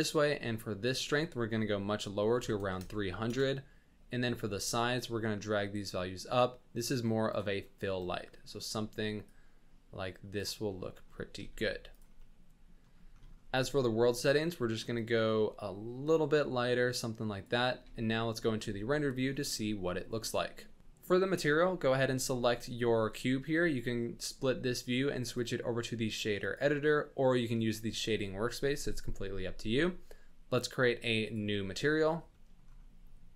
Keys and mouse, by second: 0.9-3.3 drag, 2.7 KP_0, 4.6-7.3 drag, 7.6-8.5 middle drag, 9.3-10.4 drag, 10.7-11.1 middle drag, 11.4 r, 12.2-12.8 middle drag, 14.2 click, 14.9 click, 17.8 z, 19.6-20.8 drag, 24.1 click, 25.3-26.5 drag, 28.7 n, 31.3-31.9 drag, 32.5 middle click.